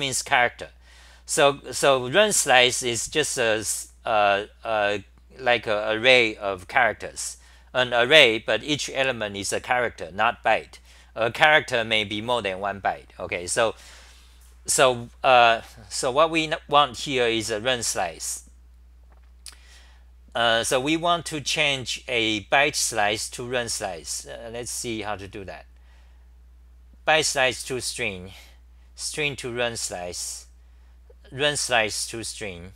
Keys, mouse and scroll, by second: 30.7-31.4 typing.